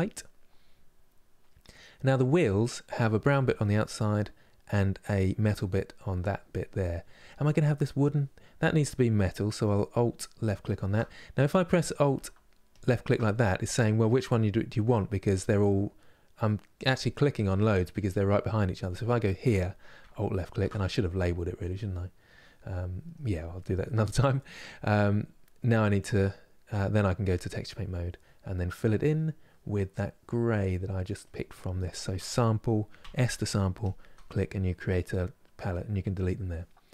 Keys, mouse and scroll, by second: 20.2 alt+click, 21.6-27.1 middle drag, 27.1 click, 27.5-35.8 middle drag, 35.8-36.9 drag.